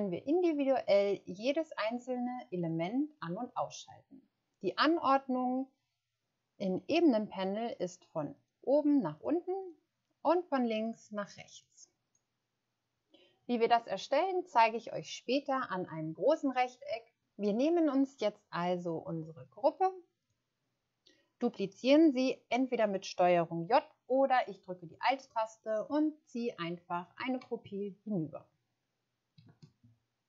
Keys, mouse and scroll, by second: 9.6 click, 25.6 alt+click, 29.8 shift+scroll up 1.